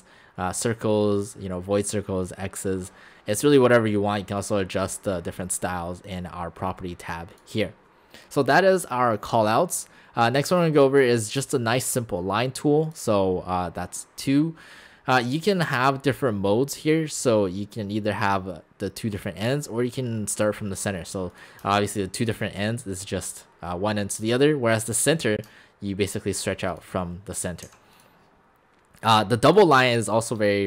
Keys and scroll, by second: 27.7 shift+x.